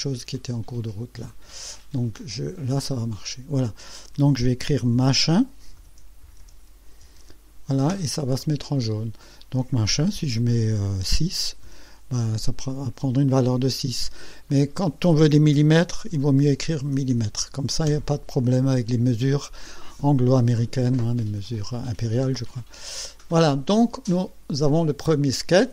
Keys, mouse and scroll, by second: 1.3 click, 2.9 click, 4.7-6.9 typing, 7.0 Return, 8.4 click, 9.2 click, 11.2 KP_6, 11.6 KP_Enter, 12.7 click, 13.6 click, 14.5 click, 16.0 KP_6, 16.9 m, 17.9 KP_Enter, 22.7 click, 25.2 click.